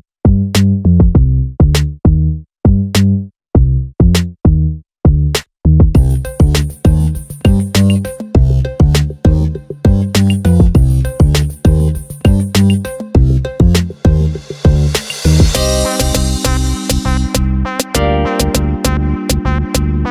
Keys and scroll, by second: 16.7 ctrl+j, 18.2 ctrl+].